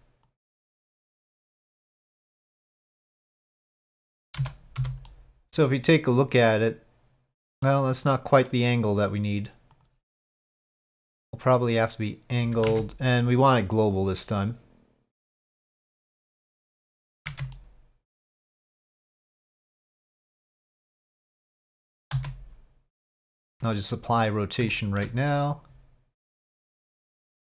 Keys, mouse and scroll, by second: 0.3 click, 1.0-3.7 middle drag, 3.7 click, 4.4 z, 5.1-7.7 middle drag, 8.5 middle click, 9.7 click, 11.1-12.4 drag, 12.7 ctrl+z, 13.3-14.3 drag, 15.4-17.1 drag, 17.3 ctrl+z, 17.5-18.5 middle drag, 19.5-21.4 drag, 21.5-21.8 middle drag, 22.1 ctrl+a, 23.8-24.3 middle drag, 24.7-25.0 shift+middle drag, 26.2 click, 27.4-27.5 drag.